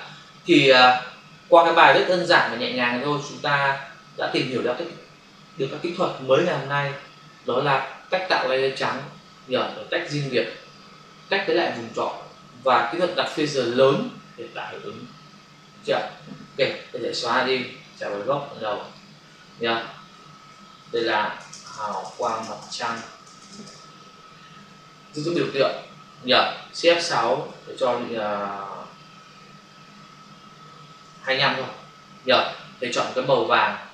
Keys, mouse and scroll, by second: 17.2 Delete, 17.8 click, 18.8 click, 20.8 ctrl+shift+n, 21.4-22.8 typing, 23.6 Return, 25.4 ctrl+click, 27.3 shift+F6, 30.9-31.6 typing, 33.4 click.